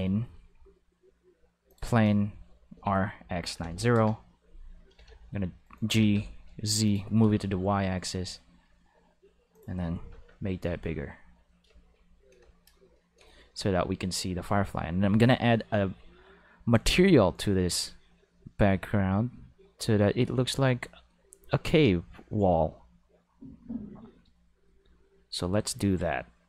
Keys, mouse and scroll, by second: 1.7 click, 2.7-6.0 typing, 3.9 Return, 6.8 click, 7.4 g, 7.5 5, 8.0 click, 8.4 5, 9.5 click, 10.1 Home, 16.7 click.